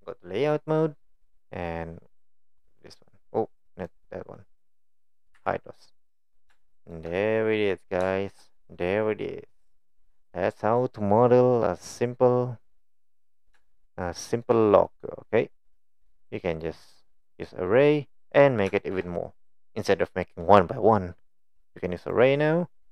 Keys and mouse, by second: 0.8-1.4 middle drag, 2.6 click, 3.9 click, 4.4-4.8 middle drag, 5.4 n, 6.7 shift+middle drag, 7.2-7.7 middle drag, 8.1 shift+middle drag, 8.8-10.8 middle drag, 11.6-12.8 middle drag, 13.7-14.5 shift+middle drag, 14.9-15.6 middle drag, 16.3-16.7 middle drag, 18.8 shift+middle click, 22.0 drag, 22.8 drag.